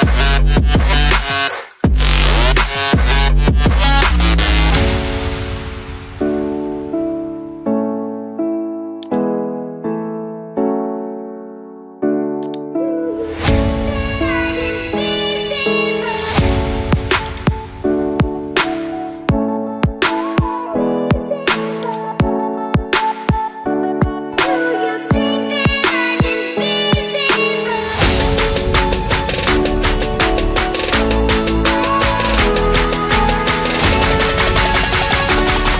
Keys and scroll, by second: 12.9 Up, 14.4 0.